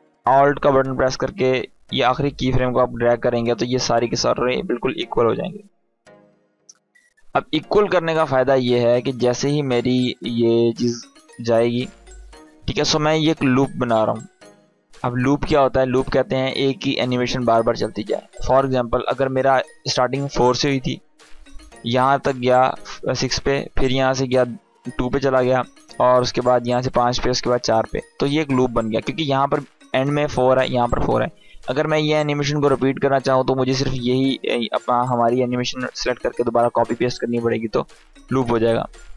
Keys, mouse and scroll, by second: 8.1 space, 17.9 space, 18.4-19.4 drag, 36.8-37.4 drag.